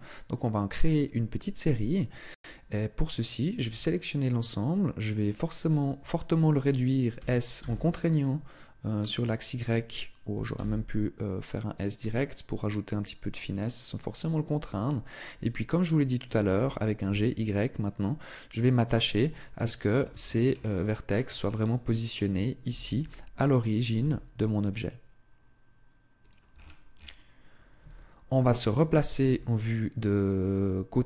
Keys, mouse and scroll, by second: 6.9 s, 9.5 click, 10.1 s, 13.3 click, 16.3 g, 18.6 click, 19.4 shift+middle click, 20.0-20.6 scroll up 3, 20.6 scroll up 5, 20.7 shift+middle click, 21.2-21.9 scroll up 1, 22.6 g, 26.0 click, 26.3-26.7 scroll down 3, 27.7 shift+middle click, 27.7-28.0 scroll down 8, 29.0 KP_3.